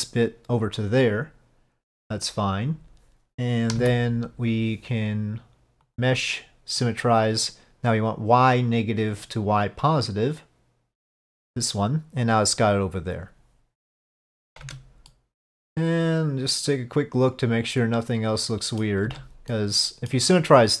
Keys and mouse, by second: 3.9 a, 6.0 click, 9.2-11.5 drag, 14.7 Tab, 15.2-18.9 middle drag, 19.2 Tab, 19.6 middle click, 20.4-20.8 middle drag.